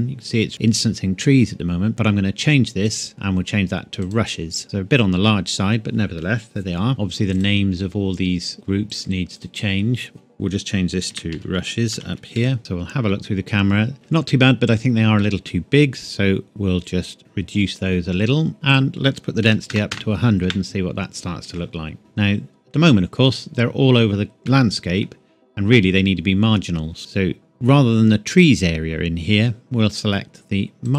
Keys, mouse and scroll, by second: 0.0 click, 0.8-2.7 scroll up 1, 2.8 click, 4.0 click, 4.6 scroll up 1, 4.9 scroll down 1, 4.9 scroll up 1, 6.9-7.3 scroll down 1, 7.3 click, 8.9 click, 11.0-12.6 typing, 17.2 click, 19.4 KP_1, 19.7 KP_0, 20.4 KP_Enter, 22.0 middle click, 22.7 scroll down 1, 24.4 middle click, 28.3 click, 30.8 click.